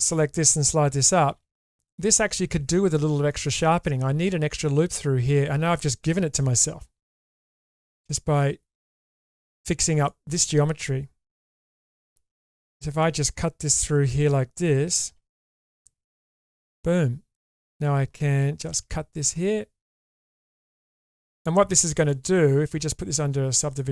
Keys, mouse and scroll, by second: 1.3 g, 6.5 k, 9.9 click, 11.3 ctrl+x, 12.7 shift+middle click, 15.1 ctrl+r, 17.5 click, 18.7 k, 22.1 shift+middle click, 22.7 Tab, 23.7 click.